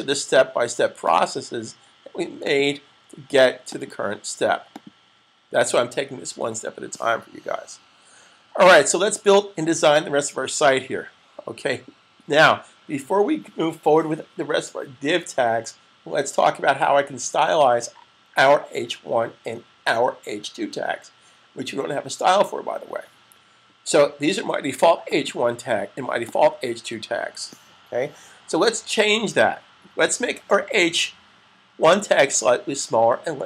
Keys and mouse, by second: 24.9 click.